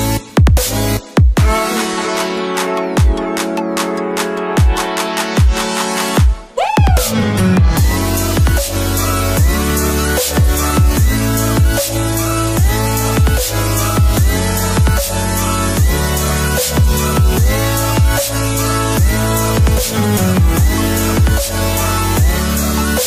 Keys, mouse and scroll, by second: 0.1-5.0 drag, 1.5-2.7 drag, 5.5-6.0 alt+scroll down 1, 7.1 click, 7.7-9.0 alt+drag, 9.6-11.6 drag, 11.6 alt+scroll up 1, 12.1-14.6 drag, 20.7-21.4 alt+scroll up 2, 21.4-23.0 drag.